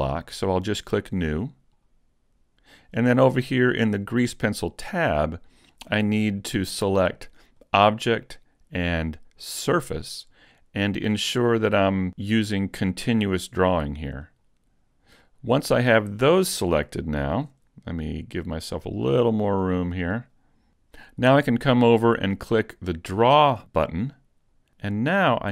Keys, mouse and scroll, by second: 1.4 click, 4.8 click, 7.6 click, 9.7 click, 14.2 click, 16.2-16.8 scroll up 1, 16.8 shift+middle click, 19.0 click, 24.2 click.